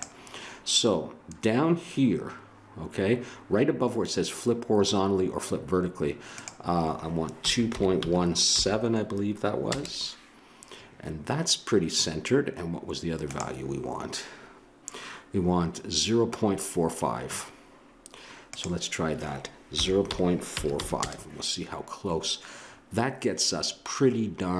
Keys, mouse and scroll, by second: 6.3-9.7 drag, 20.1 click, 22.1-24.5 middle drag.